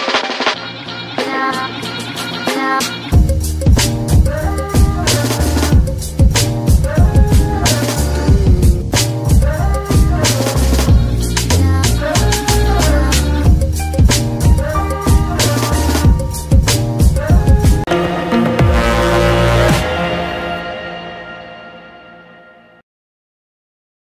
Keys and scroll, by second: 0.2 Escape, 2.2 g, 2.8 Escape, 6.2 g, 6.2 y, 9.7 Escape, 10.3 g, 10.8 Escape, 12.0 g, 12.5 Escape, 13.0 g, 13.5 Escape, 15.6 a.